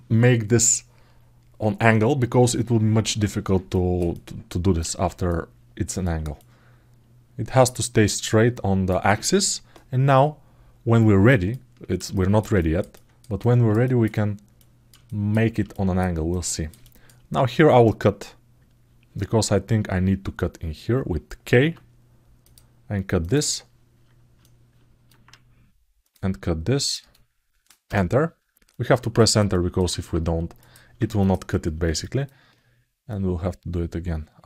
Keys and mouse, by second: 3.5 alt+middle click, 3.9 alt+middle click, 5.1 alt+middle click, 6.1-8.6 alt+middle drag, 10.7 alt+middle click, 11.3 ctrl+alt+middle click, 11.9 alt+shift+middle click, 12.3 ctrl+alt+middle click, 13.2 alt+middle click, 14.3 alt+middle click, 14.8 alt+shift+middle click, 15.5 alt+shift+middle click, 16.1 alt+middle click, 16.6 alt+shift+middle click, 24.1-27.9 alt+middle drag, 28.4 alt+middle click, 28.9 ctrl+alt+middle click, 29.3 alt+middle click, 30.4 click, 30.9 shift+click, 31.6 alt+middle click, 31.8 alt+middle click, 32.9-34.4 drag.